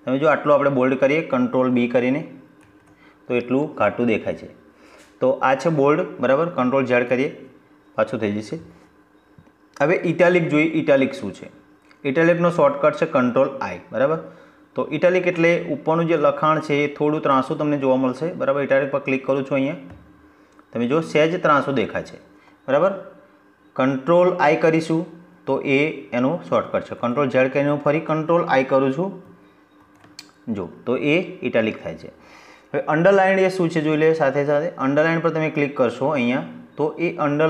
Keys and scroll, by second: 1.4 ctrl+b, 5.9 ctrl+z, 25.8 ctrl+z, 28.6 ctrl+i.